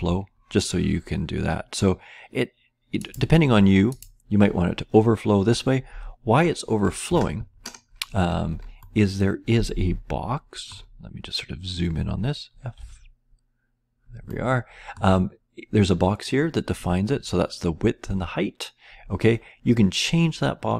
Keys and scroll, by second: 12.7 typing.